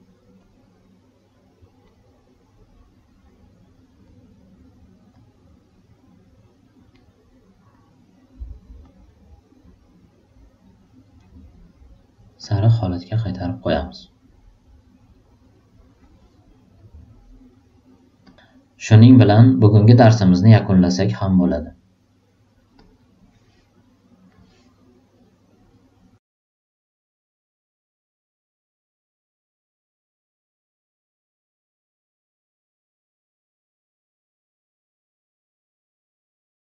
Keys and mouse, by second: 0.3-1.8 drag, 3.2-4.0 drag, 5.1-5.7 drag, 6.4 click, 7.7-8.0 drag, 8.8 click, 12.3 click, 15.2 click, 18.2 click, 22.7 click, 26.4 click, 26.9 alt+middle click, 27.0 alt+right click, 27.2 alt+middle drag, 27.4 alt+click, 29.9 click, 31.2 click, 32.4-33.5 drag, 35.0 click.